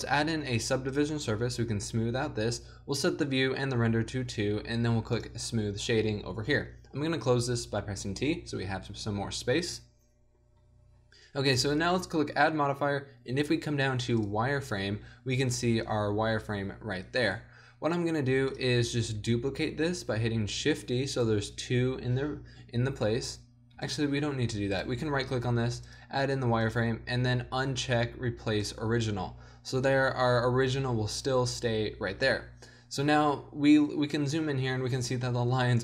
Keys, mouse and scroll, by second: 3.0-7.0 drag, 7.0-7.6 middle drag, 7.6 t, 20.5 shift+d, 23.8 x, 31.9-32.3 middle drag.